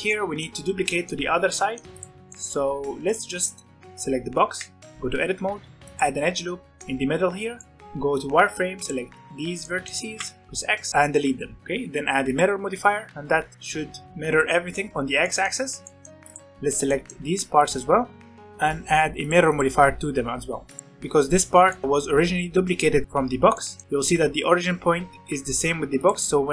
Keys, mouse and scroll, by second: 0.0-1.8 middle drag, 1.8 click, 2.3 middle click, 2.4 Tab, 2.8 scroll up 1, 3.1-5.1 middle drag, 5.1 ctrl+r, 6.7 middle click, 7.4 scroll down 2, 7.6 middle click, 7.8 b, 9.3 z, 9.6 middle click, 10.0 x, 10.9-11.6 scroll up 1, 11.6-12.3 drag, 13.1-14.9 middle drag, 15.2-15.6 middle drag, 15.6 scroll up 1, 15.7-16.3 middle drag, 16.3 alt+a, 16.7 click, 18.3-20.2 drag, 20.2-20.8 middle drag, 20.8 click, 21.6-23.0 shift+middle drag, 23.0 click, 23.5-25.9 middle drag, 25.9 click.